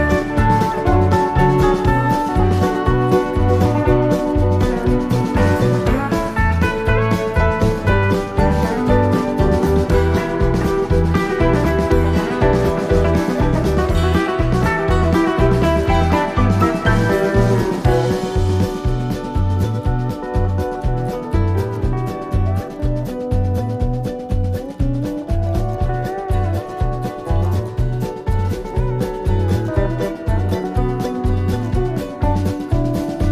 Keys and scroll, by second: 1.7 Right, 4.9 i.